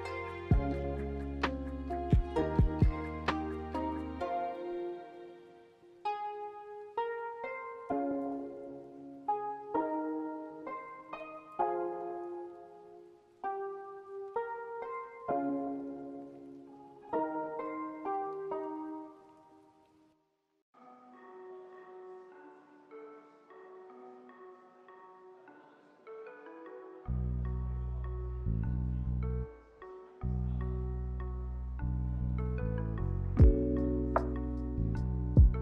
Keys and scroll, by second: 2.8 ctrl+c, 3.0 ctrl+v, 10.8 m, 15.4 Escape, 18.6 Escape, 29.0 Escape.